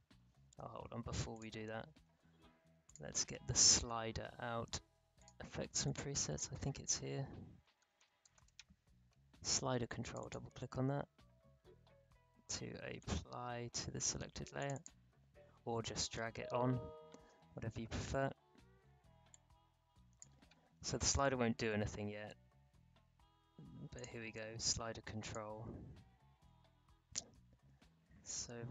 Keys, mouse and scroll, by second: 0.5 ctrl+z, 1.3 click, 2.8 click, 5.1 click, 5.7 scroll down 1, 5.8-7.6 drag, 7.4-8.9 typing, 10.0 click, 12.9 click, 19.3 click, 20.4 ctrl+z, 23.9 click.